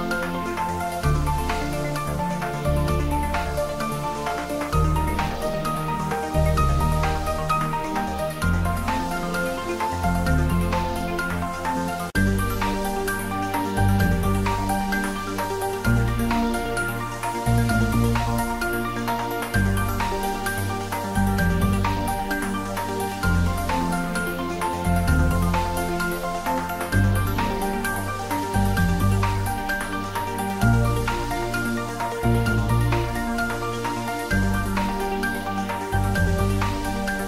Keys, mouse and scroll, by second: 7.0-8.0 scroll down 1, 8.8 scroll up 1, 9.3-10.1 scroll down 1, 10.3 click, 11.9 click, 13.1 click, 14.6 click, 15.3 1, 15.4 click, 16.8 click, 19.3 3, 19.9 0, 20.1 0, 22.1 Return, 25.3 Return, 25.5 ctrl+s, 28.3 click, 32.5 click, 34.1 click, 35.4 click, 35.7 scroll up 1, 36.2 click, 36.5 scroll down 1, 36.9 click.